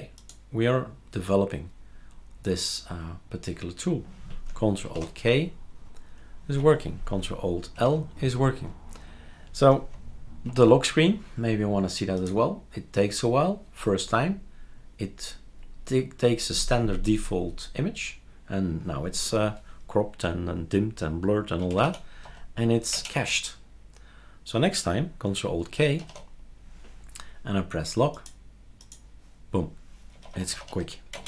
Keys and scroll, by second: 4.9 ctrl+alt+k, 6.6 Escape, 7.8 ctrl+alt+l, 10.5 ctrl+alt+k, 21.3-22.7 typing, 22.9 Return, 26.0 ctrl+alt+k, 29.9-31.2 typing.